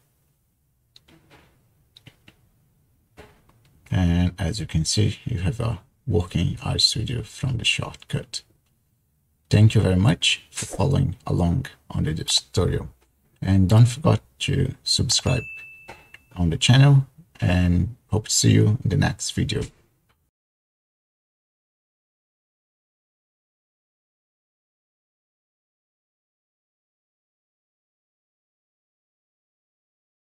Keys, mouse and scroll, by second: 0.0 Return, 0.0 typing.